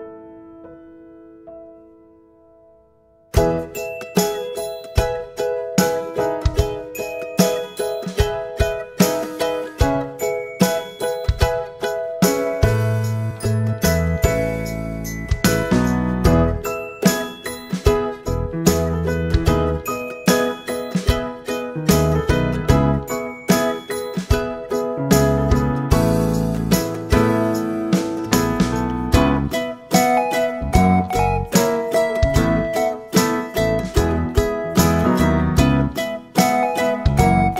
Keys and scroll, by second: 0.1 Return, 4.2-7.4 typing, 14.6-15.6 typing, 18.7-19.4 typing, 21.8 5, 22.2 Return, 25.5 typing, 25.8 Return, 32.2 typing, 32.6 Return, 36.0 typing, 37.1 ctrl+z.